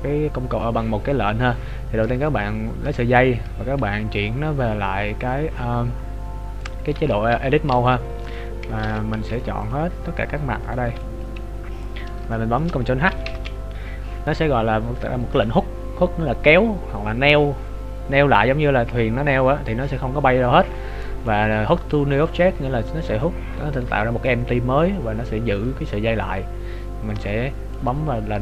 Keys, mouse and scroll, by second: 0.5-0.9 scroll up 2, 2.5 shift+middle click, 7.9 right click, 8.9 ctrl+Tab, 10.0 scroll up 1, 10.7 right click, 10.7 scroll up 6, 10.9 b, 11.5-12.3 scroll down 8, 12.3 shift+middle click, 13.3 ctrl+h.